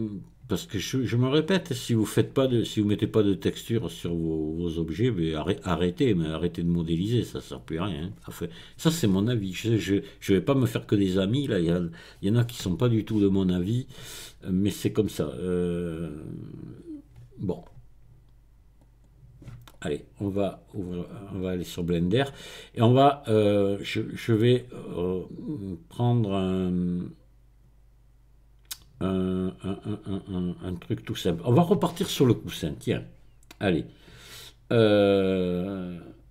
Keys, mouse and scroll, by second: 19.7 click, 21.1 click, 33.6 click.